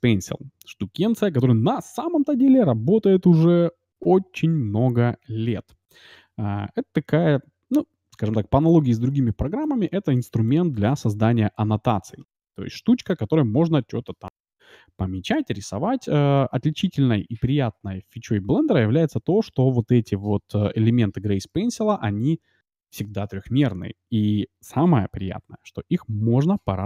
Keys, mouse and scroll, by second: 9.1-12.0 d, 9.3-13.2 drag, 13.0-14.8 middle drag, 16.5 ctrl+z, 16.8 ctrl+z, 17.1 ctrl+z, 17.5 ctrl+z.